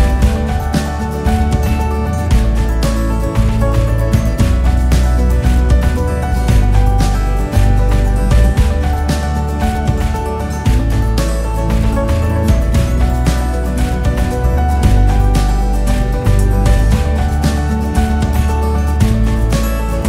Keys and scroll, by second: 16.3 ctrl+8.